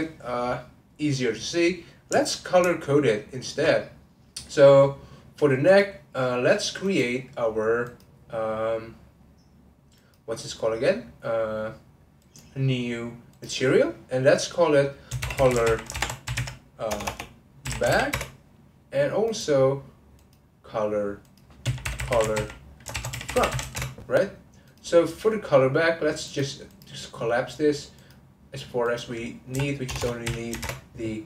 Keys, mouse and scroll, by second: 2.3 alt+click, 2.7 alt+shift+click, 3.0 alt+shift+click, 3.4 alt+shift+click, 3.9-5.7 middle drag, 5.7 click, 6.8-10.1 drag, 10.5-12.2 middle drag, 12.2-15.5 drag, 15.5 l, 17.0 BackSpace, 19.2-22.1 drag, 22.1 l, 24.6 click, 25.6-26.3 scroll down 1, 26.3 click, 26.7-28.2 drag, 30.0 BackSpace.